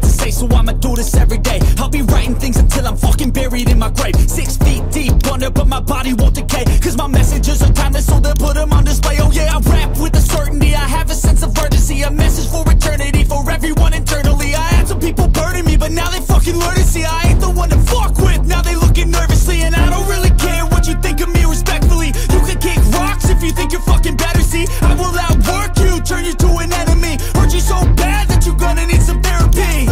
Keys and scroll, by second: 4.3 x.